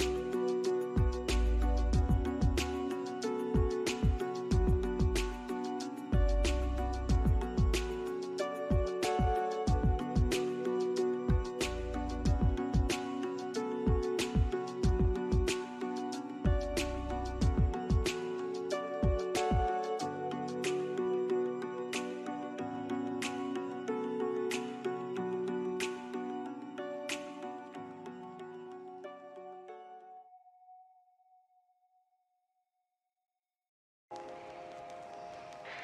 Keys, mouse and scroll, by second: 0.8 scroll up 1, 2.0 scroll down 1, 2.5 alt+middle click, 3.7 scroll up 1, 4.5 alt+middle click, 5.3-5.8 scroll up 1, 6.7 scroll up 1, 10.1 scroll down 1, 10.5 alt+middle click, 11.0 alt+scroll up 1, 11.2 alt+middle click, 11.8 scroll down 1, 12.0 alt+middle click, 14.7 scroll down 1, 14.8 alt+middle click, 15.4 alt+middle click, 15.5 scroll down 1, 15.6 scroll up 1, 16.1 alt+middle click, 16.2 scroll down 1, 16.3 alt+middle click, 16.4 scroll up 1, 16.8 scroll down 1, 16.9 alt+middle click, 17.0 scroll up 1, 17.5 scroll down 1, 17.5 alt+middle click, 17.7 alt+scroll up 1, 18.2 scroll down 1, 18.2 alt+middle click, 20.5 scroll down 1, 21.3 alt+middle click, 25.3 scroll up 1, 25.8 alt+middle click, 28.1 BackSpace, 28.8-29.2 scroll down 1, 29.3 alt+middle click, 29.6 scroll up 2, 30.3 alt+middle click, 31.1 alt+right click, 32.9 alt+middle click.